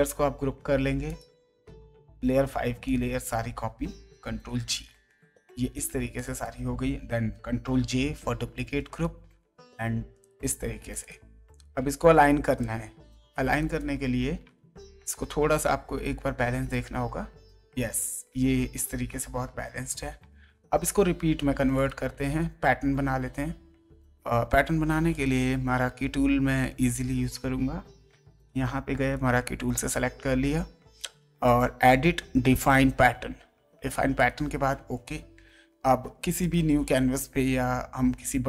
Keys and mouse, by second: 1.1 click, 2.8 shift+click, 4.2 ctrl+g, 5.2 ctrl+t, 6.1 click, 8.9 ctrl+right click, 10.2 click, 12.6 click, 15.9 ctrl+Right, 21.7 click, 25.1 click, 26.6 click, 31.4 click, 32.6 click, 34.1 click, 36.4 click.